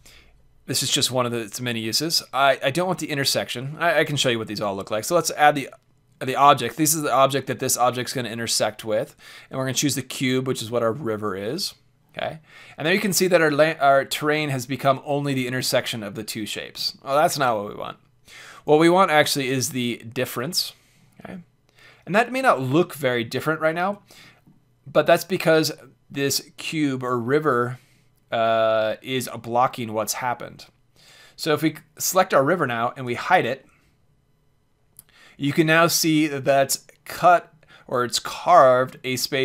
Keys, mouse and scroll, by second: 4.9-6.9 drag, 12.8-14.2 drag, 14.2-14.7 middle drag, 15.4-17.3 middle drag, 18.5-20.5 drag, 21.3-23.3 middle drag, 24.2-30.9 middle drag, 30.9-32.8 drag, 33.0 h, 33.6-35.6 middle drag, 39.1-39.4 drag.